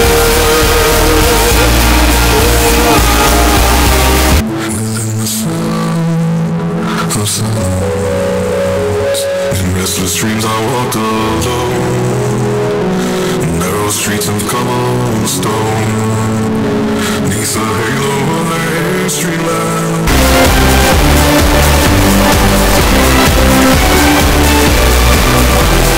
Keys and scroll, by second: 4.5 Page_Down.